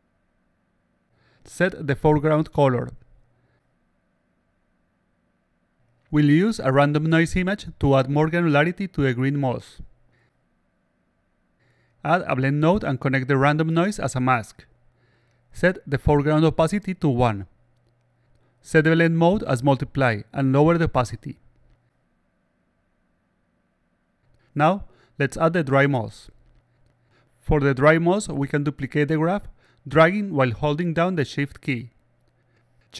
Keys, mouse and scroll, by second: 1.7 click, 2.3 click, 5.6 click, 7.0-8.6 drag, 9.2 click, 12.0 click, 12.5-13.3 drag, 14.2-15.3 drag, 16.8-17.6 drag, 18.5 click, 19.5 click, 20.7-26.6 drag, 28.0-29.5 drag, 30.3-32.4 shift+drag.